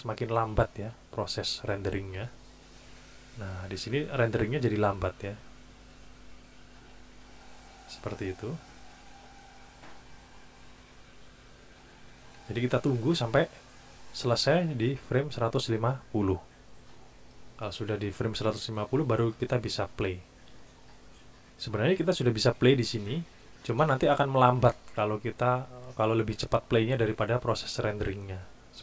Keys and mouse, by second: 1.9 click, 8.2 click.